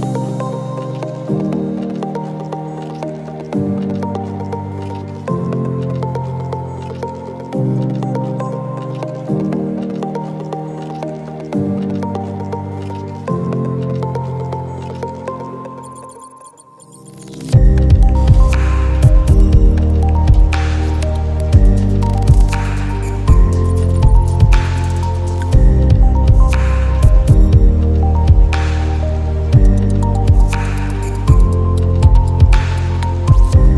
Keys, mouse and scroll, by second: 7.1-10.7 shift+drag, 9.2-10.7 drag, 13.6 shift+click, 14.5-22.8 drag, 15.5-17.0 drag, 22.6 click, 23.0 click, 25.7-30.4 shift+drag, 31.9 click.